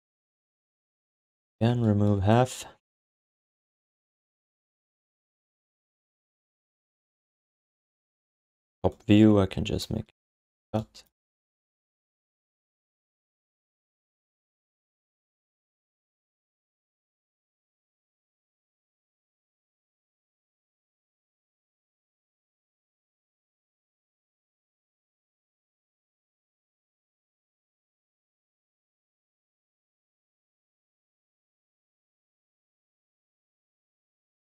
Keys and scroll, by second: 1.4 5, 10.6 q, 11.2 alt+shift+d, 18.4 Tab, 22.6 alt+shift+d, 22.8 ctrl+s.